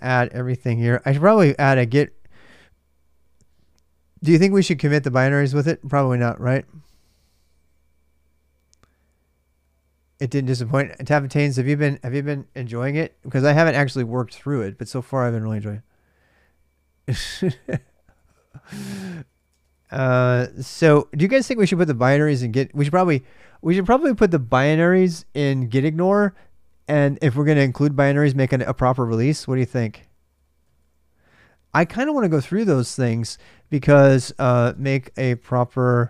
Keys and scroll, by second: 0.0-1.0 typing, 17.7-20.9 typing, 29.8-31.0 typing, 34.0-36.0 typing.